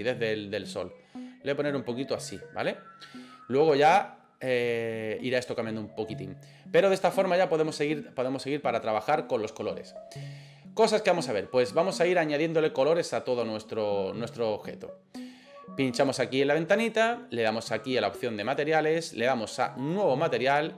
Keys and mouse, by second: 15.9 right click, 19.9 click.